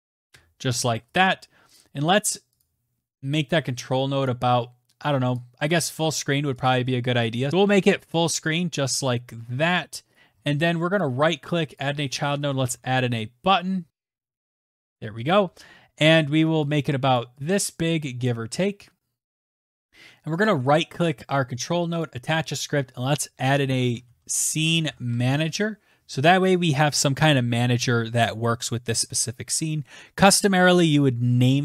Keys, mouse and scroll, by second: 1.3 click, 2.4 click, 3.6 click, 5.3 scroll down 2, 5.4-7.3 scroll, 7.3 ctrl+z, 7.7 click, 8.0 right click, 8.9 click, 9.1-11.7 typing, 12.4-14.5 Return, 14.1 click, 15.2 click, 17.3 scroll down 1, 18.6 right click, 18.6 middle click, 19.7 click, 19.9-22.7 typing, 24.2 click, 28.3 click.